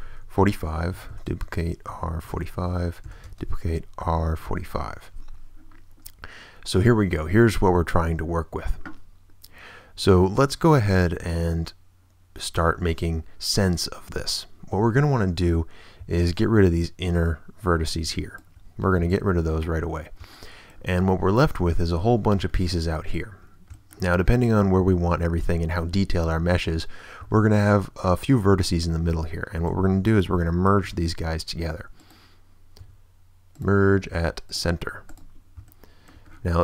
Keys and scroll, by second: 0.0 4, 0.4 Return, 0.9 shift+Return, 1.1 shift+d, 1.9 r, 2.4 Return, 3.0 shift+d, 3.2 shift+space, 4.0 r, 4.4 4, 4.6 Return, 12.7 a, 18.9 ctrl+x, 19.6 x, 30.8 ctrl+w, 31.5 w, 32.8 w.